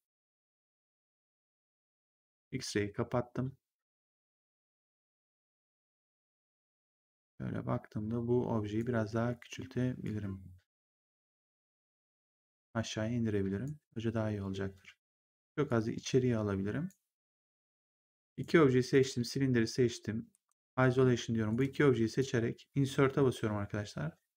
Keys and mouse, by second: 2.0 click, 5.9 click, 6.2 w, 6.9 click, 9.0 r, 10.0 click, 11.6 w, 12.4 click, 15.6 click, 18.2 click, 20.2 1, 21.4 click, 22.0 click, 23.1 Insert, 23.1 KP_0.